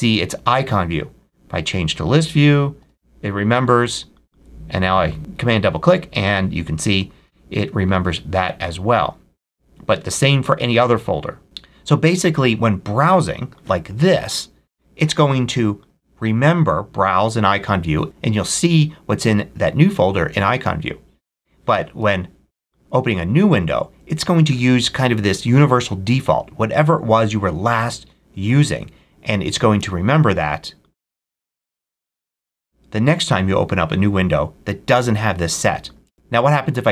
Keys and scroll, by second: 2.7 super+w, 7.8 super+w, 29.7 super+w, 36.0 super+w.